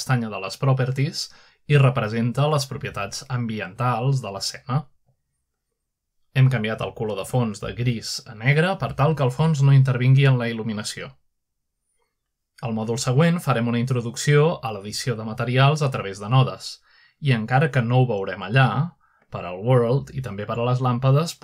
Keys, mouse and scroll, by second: 2.4 click, 4.6 click, 6.0-7.2 scroll down 1, 8.2 click, 9.8-13.1 drag, 14.4-15.0 drag, 15.8-16.3 middle drag, 16.5-17.4 scroll down 1, 18.4-21.1 scroll down 1, 21.2 click.